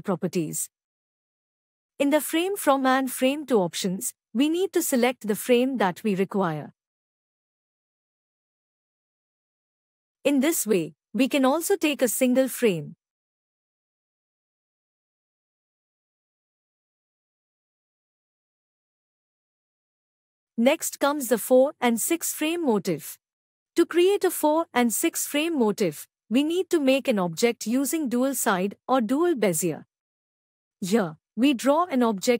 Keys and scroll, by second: 20.9 ctrl+a, 29.6 F11.